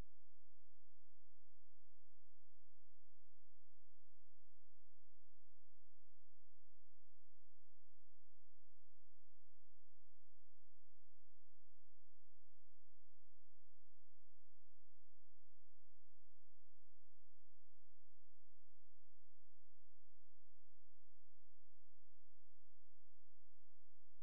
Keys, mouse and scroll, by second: 0.0 click, 2.4 click, 4.1-6.2 drag, 7.4 click, 9.6 click, 11.7 click, 13.6 Right, 20.0 Left, 24.1 click.